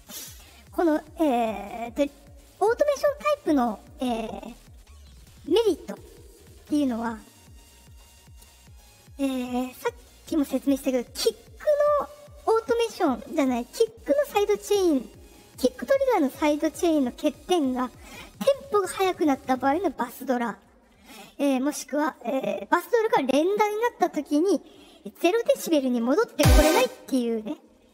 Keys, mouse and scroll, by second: 1.8 middle click, 3.8 click, 5.8 click, 6.9-8.7 drag, 10.5 click, 26.2 space, 26.6 space.